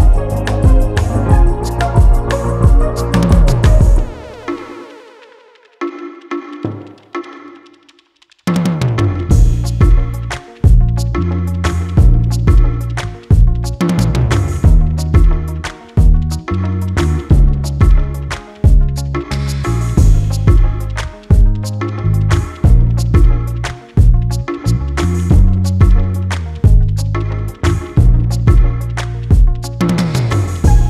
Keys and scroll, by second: 5.9 Delete, 18.7 ], 21.9 4, 25.2 ctrl+z.